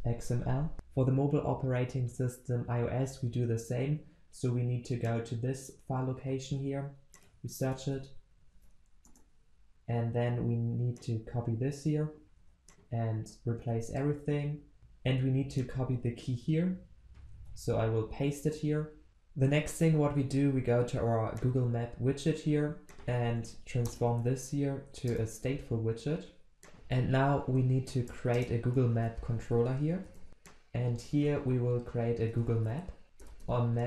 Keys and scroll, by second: 7.8 ctrl+shift+n, 8.5 ctrl+v, 13.3 ctrl+a, 17.4 ctrl+v, 18.8 ctrl+s, 25.4 alt+Return.